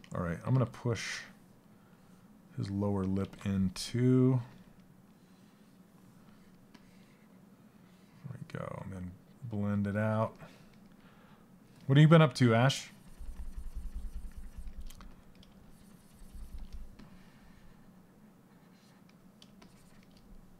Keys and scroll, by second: 8.4 s.